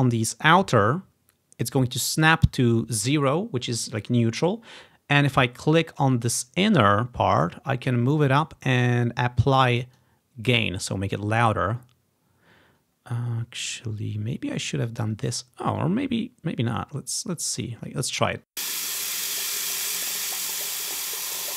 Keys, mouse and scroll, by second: 6.2-10.1 drag, 11.6 click, 15.9-18.6 drag, 18.6 space.